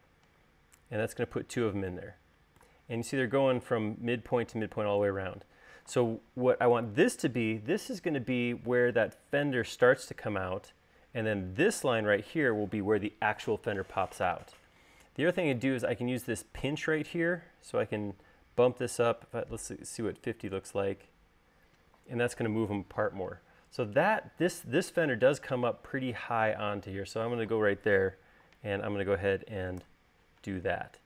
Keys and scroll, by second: 0.2 Return, 19.4-20.3 typing, 21.2 Return, 30.2 Return.